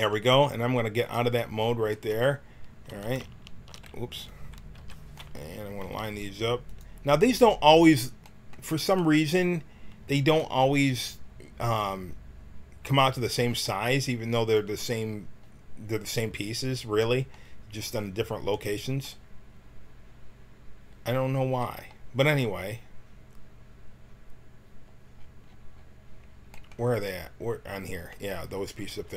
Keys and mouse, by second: 1.1-2.9 drag, 2.9 a, 4.8 l, 5.8 g, 12.9-15.4 right drag.